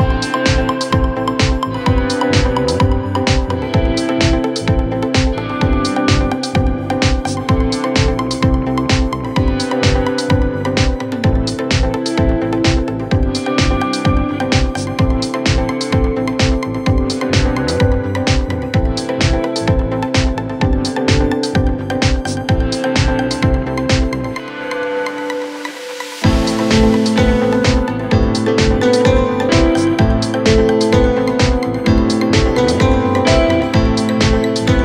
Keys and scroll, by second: 9.5 Delete.